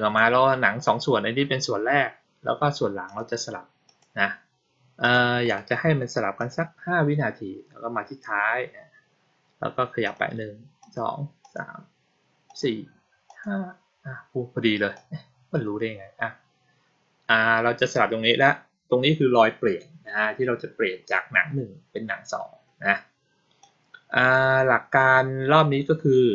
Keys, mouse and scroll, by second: 2.9 click, 3.7 click, 4.9 click, 5.3 right click, 6.3 click, 9.9 click, 10.7 click, 11.3 click, 12.3 click, 13.1 click, 14.8-18.2 drag, 23.5-24.2 drag.